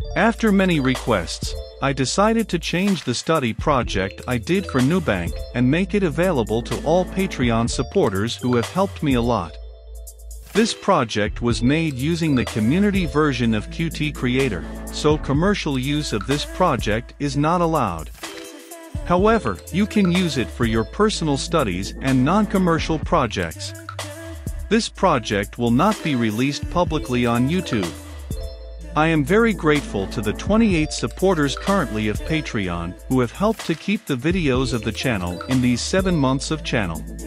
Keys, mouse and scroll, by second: 32.4-37.2 drag.